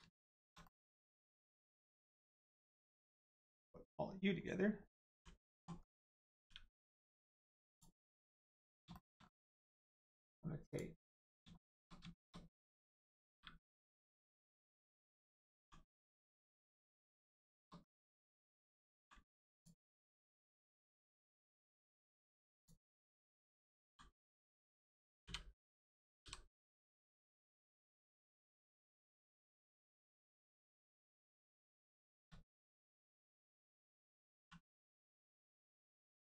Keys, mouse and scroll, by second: 0.6 middle click, 0.7 middle click, 0.9-1.6 scroll up 1, 1.6 click, 2.7 shift+click, 3.3 middle click, 3.3 middle click, 5.1 u, 5.7 scroll down 1, 6.3 g, 7.7 click, 8.2 middle click, 8.6 scroll up 1, 8.9 shift+middle click, 9.1 scroll up 1, 9.7 middle click, 10.1-10.6 scroll up 1, 10.7 click, 11.5 shift+middle click, 13.3 g, 14.0 click, 15.5 g, 16.2 click, 16.5 scroll down 1, 16.9 middle click, 17.3 shift+middle click, 17.7 scroll down 1, 18.5 click, 18.9 g, 19.5 click, 19.9 middle click, 20.3 shift+middle click, 20.5 scroll up 1, 20.9 middle click, 21.6 click, 22.5 alt+click, 23.8 g, 24.5 click, 26.2 g, 26.8 click, 27.3 middle click, 27.6 shift+middle click, 28.2 middle click, 28.2 middle click, 28.8 shift+middle click, 29.4 click, 29.4 click, 29.7 middle click, 30.8-31.1 scroll up 1, 31.2 middle click, 32.0 shift+middle click, 32.4 scroll up 1, 33.2 middle click, 34.4 1, 34.8 click, 35.1 middle click.